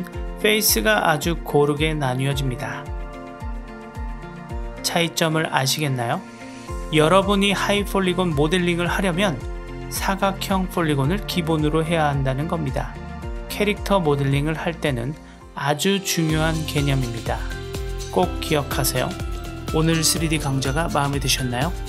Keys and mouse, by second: 0.6 Tab, 1.0 middle click, 4.1 Tab, 4.3 click, 5.1 click, 5.4 right click, 7.6-8.4 drag, 10.3 Tab, 11.1-12.7 middle drag, 12.9 Tab, 13.6-14.2 drag, 15.6 Tab, 16.5 shift+middle click.